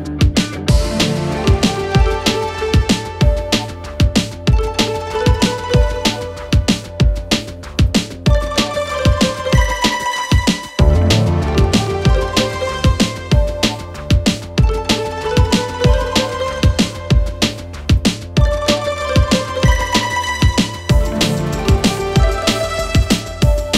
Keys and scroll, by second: 0.2 4, 18.0 ctrl+z.